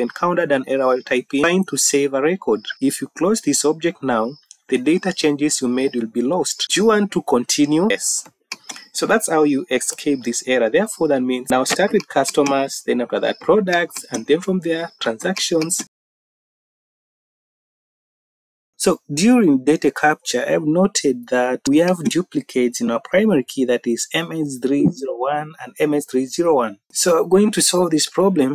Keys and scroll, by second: 16.7 Down, 16.9-18.1 typing, 24.6 Up.